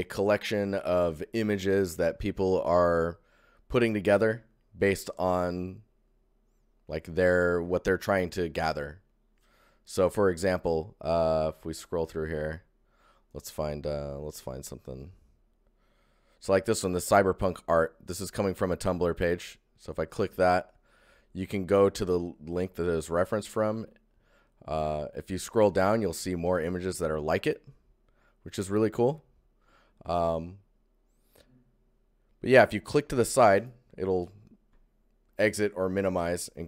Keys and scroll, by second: 1.6 ctrl+1, 35.4 ctrl+shift+1.